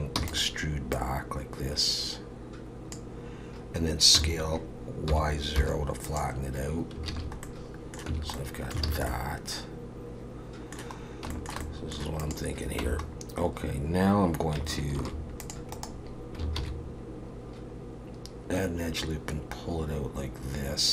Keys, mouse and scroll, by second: 0.2 e, 0.9 click, 4.1 s, 7.1 alt+a, 7.4 middle click, 8.1 Tab, 8.4 middle click, 8.9 alt+a, 9.1 middle click, 11.1 scroll down 1, 11.3 shift+middle click, 11.6 middle click, 12.2 click, 12.8 Tab, 13.1-13.7 scroll up 2, 13.7-14.4 scroll down 1, 15.0 ctrl+r, 16.6 ctrl+b.